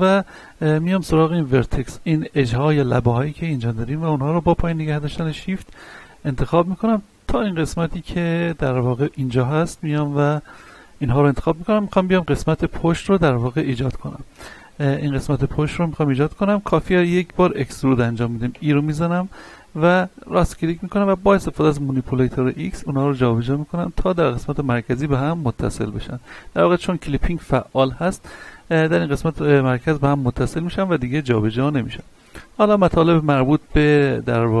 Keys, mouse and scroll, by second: 0.3 ctrl+Tab, 0.7 click, 1.3 right click, 2.9 shift+right click, 5.8 shift+middle click, 6.4 middle click, 7.3 shift+right click, 7.8 middle click, 8.9 shift+right click, 9.4-15.7 middle drag, 15.7-18.5 shift+middle drag, 18.5 e, 19.9 right click, 21.5-28.1 drag, 28.1-29.7 middle drag, 29.7-34.6 drag.